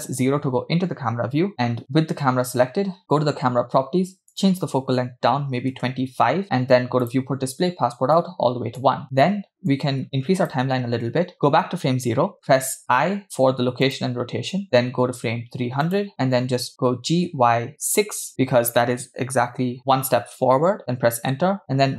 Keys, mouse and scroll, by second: 3.1-6.2 drag, 7.1 drag, 7.4-8.1 scroll down 2, 8.1 click, 9.7 click, 11.4 Left, 12.9 i, 14.6 middle click, 16.0 click, 17.0 g.